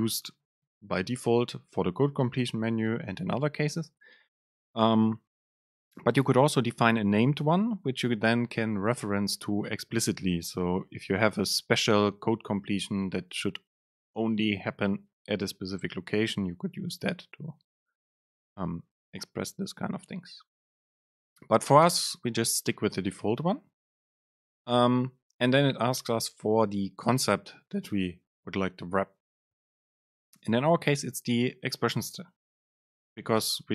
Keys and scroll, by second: 27.2 super+space.